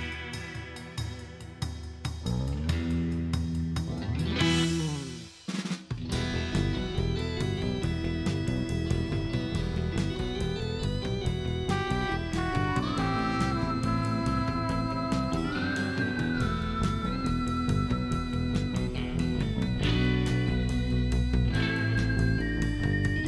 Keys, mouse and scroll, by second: 4.2 shift+right click, 9.8 shift+right click, 14.8 click, 15.9 click, 16.6 shift+right click, 19.3 scroll down 1, 19.6 middle click, 20.6 shift+right click.